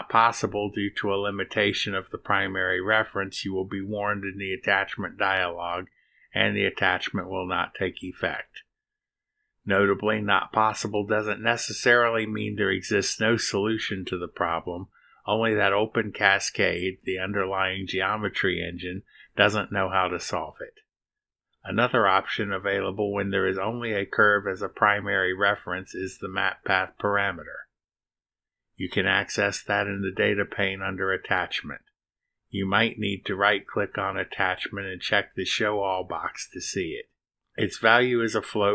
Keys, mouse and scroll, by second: 1.0 click, 5.9 click, 9.2 click, 9.8 right click, 14.3 click, 16.2-18.4 drag, 19.7 click, 21.7 click, 23.0 click, 25.6 click, 27.3 BackSpace, 30.0 click, 31.4 click, 34.1 scroll up 1, 35.7 click, 37.6 click.